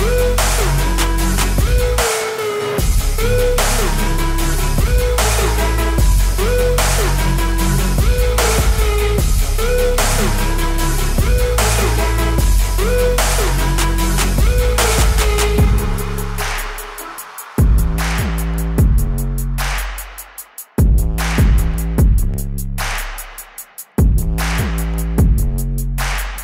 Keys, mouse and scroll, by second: 0.4 click, 0.9-1.2 scroll, 1.2 scroll up 7, 2.2 x, 2.3 ctrl+s, 2.9 alt+a, 2.9-5.4 shift+drag, 5.7-7.6 drag, 7.7 click, 8.5 ctrl+x, 10.9 shift+click, 11.1 ctrl+z, 11.1-11.7 drag, 11.7 shift+q, 12.2 shift+q, 13.3 click, 14.6 click, 14.9 click, 15.6-17.2 scroll, 16.7 shift+a, 17.2 click, 19.1 click, 19.2 shift+d, 19.5 click, 20.1 click, 21.7-22.4 typing, 22.0 ctrl+z, 22.4 alt+a, 23.4 scroll, 24.1 click, 24.7 shift+d, 24.9 click, 25.3 shift+d, 25.5 click, 25.7 click, 26.2 click.